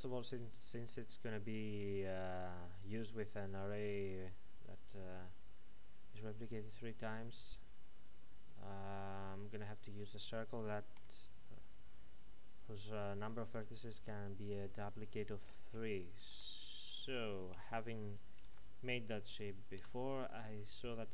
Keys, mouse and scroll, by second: 9.7 click, 12.1-13.9 scroll up 1, 14.0 click, 19.8 KP_Enter.